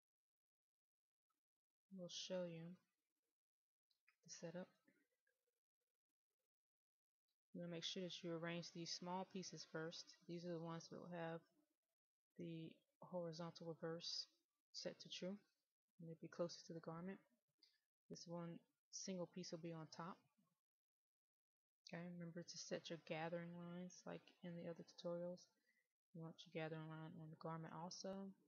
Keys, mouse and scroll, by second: 0.5 click, 3.1-3.8 scroll down 1, 3.8-8.1 middle drag, 8.8 click, 22.0-28.4 scroll down 1.